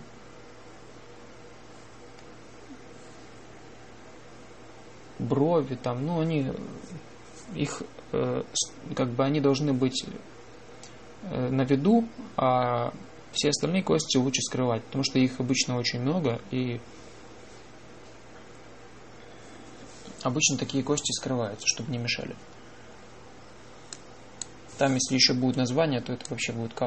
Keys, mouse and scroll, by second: 24.8 click.